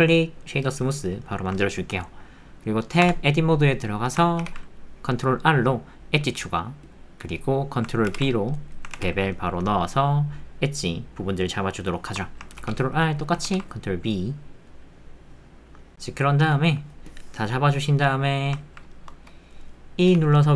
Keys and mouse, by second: 4.4 ctrl+r, 8.5 click, 8.9 ctrl+b, 12.6 ctrl+r, 13.4 ctrl+b, 16.4 Tab, 18.0 middle click, 18.6 ctrl+click, 18.9 shift+click, 19.3 click, 20.0 e.